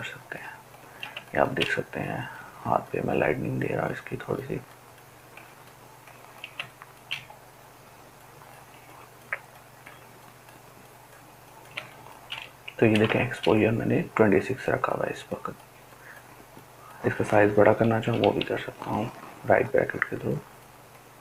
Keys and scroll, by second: 17.5 ], 17.6 ], 17.8 ], 18.0 ].